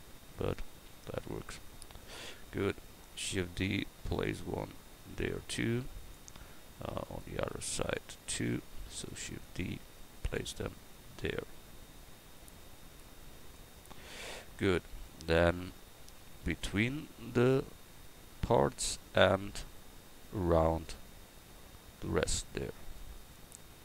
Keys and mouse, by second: 2.0-3.4 right drag, 3.2 shift+d, 7.1-8.9 right drag, 8.8 shift+d, 14.0 a.